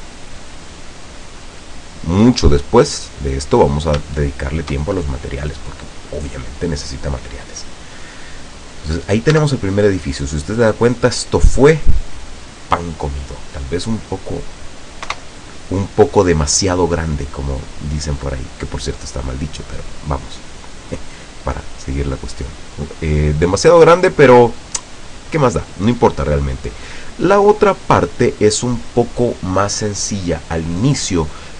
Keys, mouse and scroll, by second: 0.6 click, 1.0 middle click, 1.6 scroll up 1, 1.9-2.7 scroll down 1, 3.0-3.4 scroll up 1, 4.1 shift+click, 5.5 scroll down 1, 7.6-8.0 scroll down 1, 8.1-9.6 drag, 9.4 Tab, 10.1 scroll down 1, 10.6-10.9 scroll up 1, 11.2-11.6 scroll down 2, 13.2 scroll down 2, 13.6 middle click, 15.2 KP_0, 17.2-20.4 drag, 22.0 scroll down 1, 22.4 middle click, 23.2 scroll down 1, 23.6-24.2 middle drag, 24.4-25.0 scroll down 1, 26.4-26.8 scroll down 2.